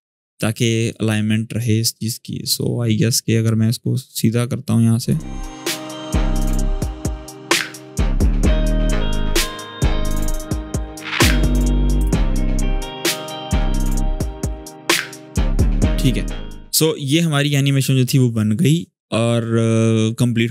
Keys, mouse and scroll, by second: 0.2-0.9 click, 0.6 space, 2.3-5.1 drag, 5.5 scroll up 1, 5.6 space, 5.7 click, 5.8 space, 6.2-7.3 click, 7.1 space, 7.1 click, 7.3 click, 7.5 space, 7.7-10.8 drag, 11.0 click, 11.3 scroll down 1, 11.4 space, 11.9 alt+scroll down 1, 12.0 click, 12.5 space, 13.0 click, 13.1 space, 13.8 click, 14.1 alt+scroll down 1, 14.4-14.7 click, 14.6 shift+space, 15.4-16.3 drag.